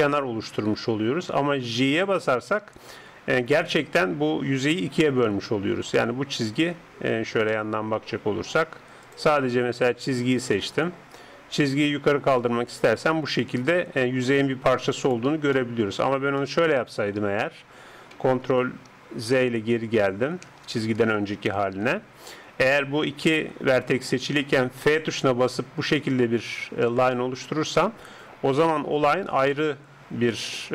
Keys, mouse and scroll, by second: 7.6-10.1 middle drag, 9.1-11.7 drag, 10.1 right click, 10.6-17.2 middle drag, 11.9-15.6 drag, 17.2 KP_7, 19.2 ctrl+z, 19.8 ctrl+z, 20.6 ctrl+z, 21.5 ctrl+z, 24.9 f, 27.2-30.3 middle drag, 30.3-30.7 drag.